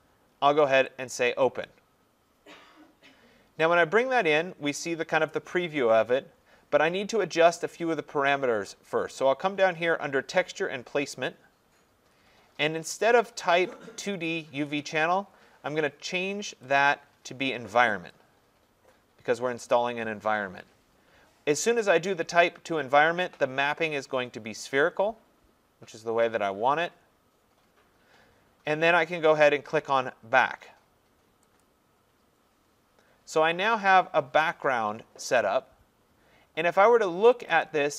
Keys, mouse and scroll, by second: 1.1 click, 11.3 click, 16.6 click, 18.1 click, 20.8 middle click, 23.2-24.4 scroll, 31.6 click, 34.4 click, 37.4 click, 37.6 click.